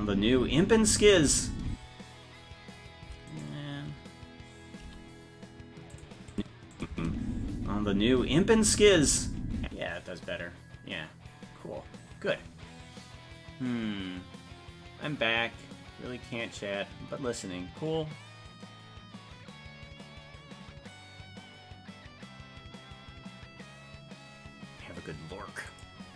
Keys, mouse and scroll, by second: 3.3 right click, 4.9 g, 6.3 click, 6.8 click, 6.9 space.